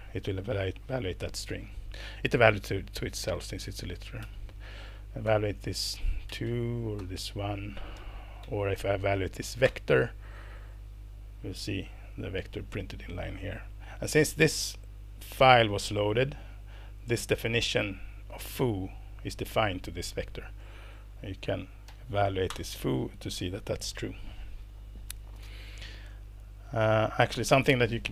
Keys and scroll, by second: 4.2 Left, 5.2 ctrl+Return, 6.3 Left, 6.5 Left, 7.0 ctrl+Return, 8.4 ctrl+Up, 9.6 ctrl+Return, 22.5 ctrl+Return, 27.5 Escape.